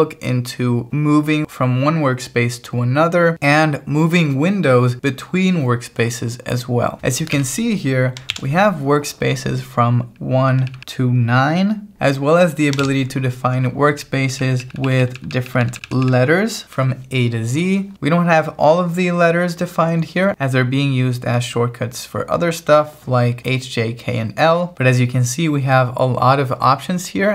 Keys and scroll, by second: 7.4 k, 8.3 shift+v, 10.2 j, 10.7 j, 11.9 Escape, 12.8 shift+v, 14.0-16.1 typing.